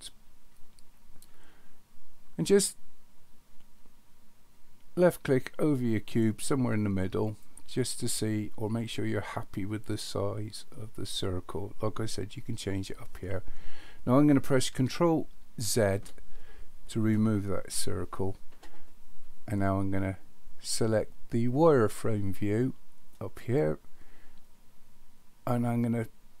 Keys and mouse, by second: 7.3 click, 15.7 ctrl+z, 23.2 click.